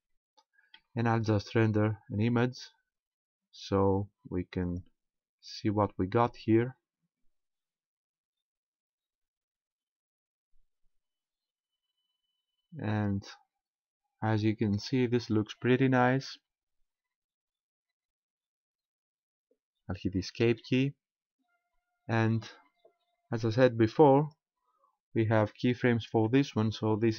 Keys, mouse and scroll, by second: 2.2 click, 4.6 click, 20.4 Escape, 24.2 click, 26.4 alt+a.